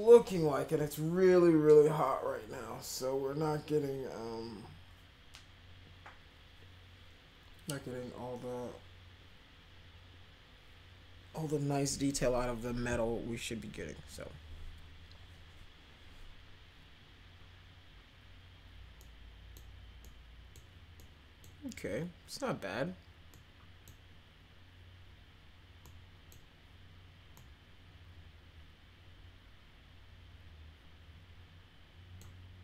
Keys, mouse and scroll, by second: 18.9 middle click, 20.0 middle click, 20.9 middle click, 23.3-23.8 middle drag, 25.8 middle click, 27.3-32.2 middle drag.